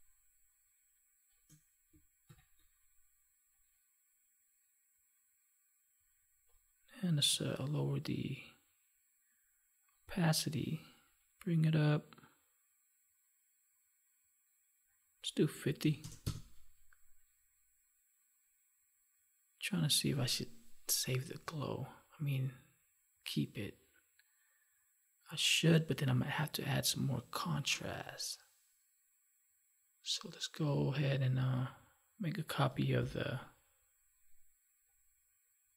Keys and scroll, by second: 2.2 ctrl+=, 32.9 ctrl+j.